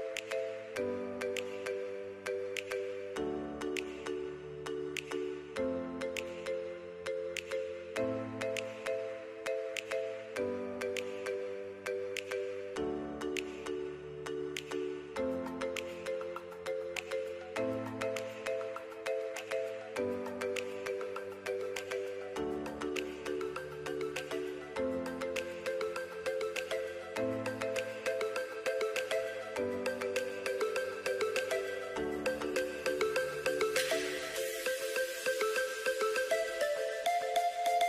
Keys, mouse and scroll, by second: 21.0 click, 26.4 click.